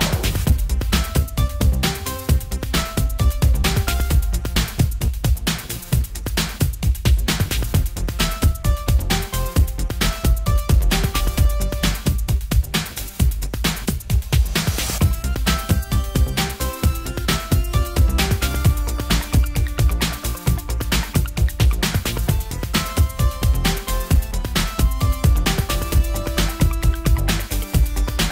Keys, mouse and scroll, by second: 0.1-1.6 middle drag, 1.6 n, 3.3 middle click, 3.6-5.0 drag, 5.0-6.5 middle drag, 6.5 click, 6.5 n, 7.3 n, 8.5 middle click, 9.1 middle click, 9.4 middle click, 13.0 middle click, 14.4 middle click, 17.9 middle click, 18.1 middle click, 18.5 middle click, 19.1 n, 20.0 click, 21.7-23.1 drag, 22.9 right click, 24.2 click, 24.6-27.1 middle drag.